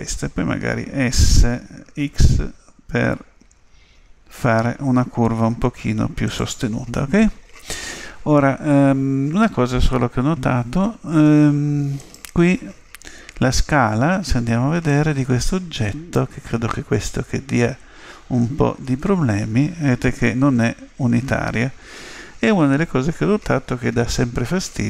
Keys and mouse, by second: 1.0 s, 11.2 Tab, 11.9 right click, 14.9 click.